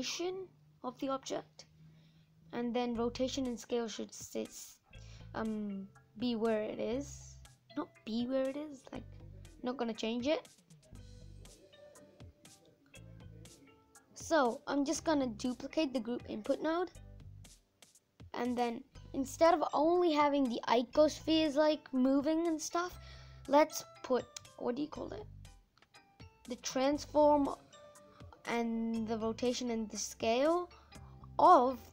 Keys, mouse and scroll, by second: 2.9 click, 15.1 shift+d, 26.9 click, 29.1 click, 31.2 click.